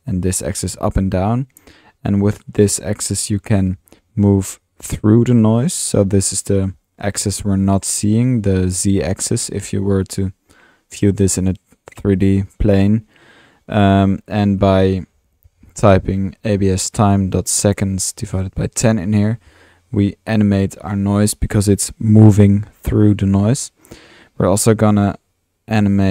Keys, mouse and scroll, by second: 3.2-9.1 middle drag, 14.6 drag, 24.9-25.8 drag.